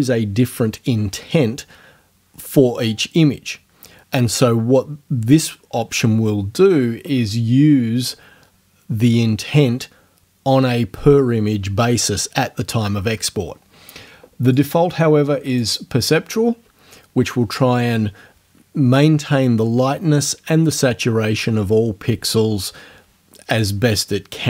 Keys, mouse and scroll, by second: 14.5 click, 15.6 click.